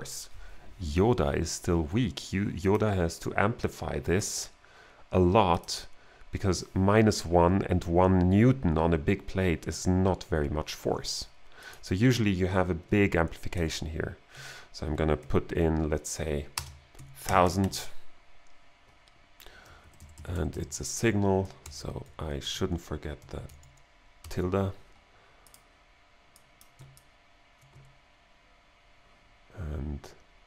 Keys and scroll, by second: 13.5 shift+n, 15.2 shift+3, 16.6 space, 17.0 1, 17.3 0, 19.9 Left, 21.7 alt+g, 22.5 BackSpace, 24.2 alt+n.